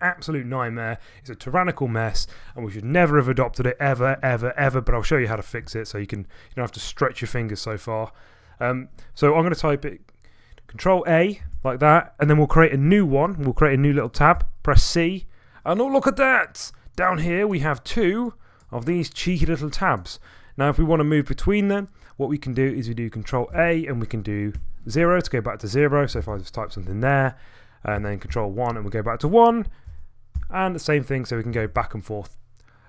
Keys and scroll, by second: 11.4 ctrl+a, 14.3 c, 23.5 ctrl+a, 24.5 0, 25.9-26.8 typing, 28.0 ctrl+a, 28.2-28.9 typing, 29.9 ctrl+a, 30.1-31.7 typing.